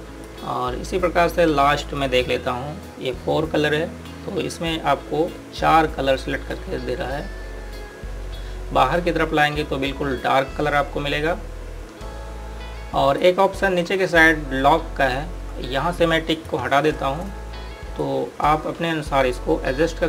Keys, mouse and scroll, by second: 6.4 click, 16.9 click.